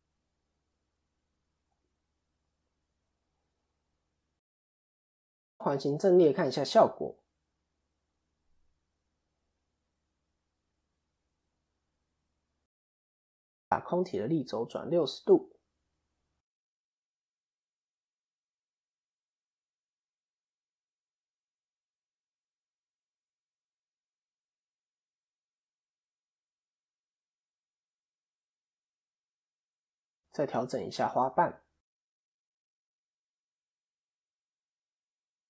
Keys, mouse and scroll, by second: 0.5 click, 1.4-3.8 typing, 5.2 Tab, 7.8 KP_1, 8.6-9.0 scroll down 3, 9.0 shift+middle click, 9.9 shift+a, 12.0 shift+middle click, 13.1 click, 19.8 click, 27.9 click, 28.5 middle click, 29.4 KP_1, 29.7 KP_7, 30.6 scroll up 3, 30.9 shift+middle click, 32.4 Tab, 32.7 KP_3, 33.2 KP_1, 33.9 scroll down 1, 34.5 scroll down 2, 34.6 shift+middle click, 34.9 shift+scroll up 1.